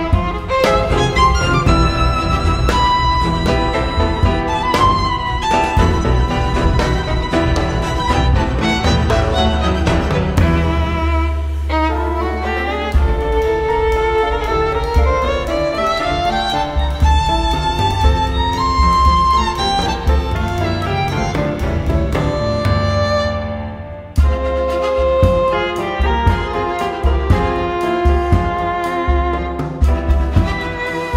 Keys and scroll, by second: 1.1 Return, 1.1 super+s, 1.1-3.3 typing, 3.8 super+z, 3.9 Left, 4.4 super+r, 4.6-7.9 typing, 10.5-22.0 typing, 16.6 Left, 16.6 Right, 16.7 super+r, 17.2 Right, 20.2 Left, 20.2 Right, 20.3 super+r, 22.5 Return, 22.5 super+v, 23.2-24.3 typing.